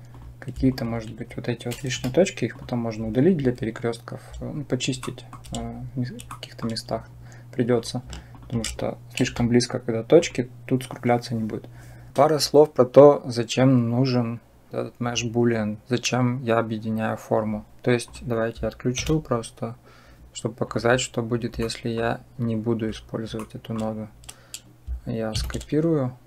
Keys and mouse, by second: 0.5 shift+click, 1.8 Delete, 5.0 shift+middle click, 6.1 shift+middle click, 8.1 shift+click, 9.1 Delete, 14.9 click, 17.9 click, 18.8 m, 20.5 click, 21.5-21.8 middle drag, 23.3 shift+click, 25.2 shift+d.